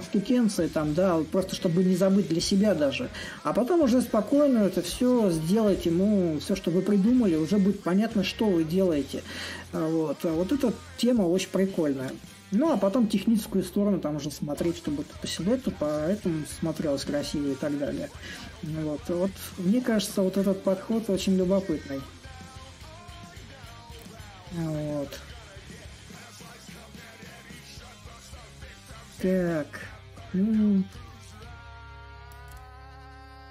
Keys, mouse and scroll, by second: 0.0-5.0 drag, 5.5-10.5 drag, 11.1-20.9 drag, 21.2-26.2 drag, 28.5-33.5 drag.